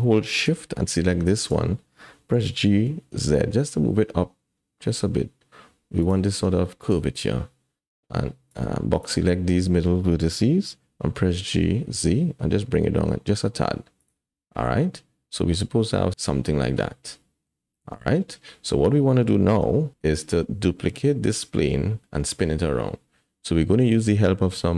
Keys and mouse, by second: 0.9 shift+click, 2.5 g, 6.7 shift+click, 8.7 click, 11.0 g, 14.9 click, 15.7-17.5 middle drag, 18.0 alt+z, 18.2 middle click, 19.6 KP_1, 20.9 middle click.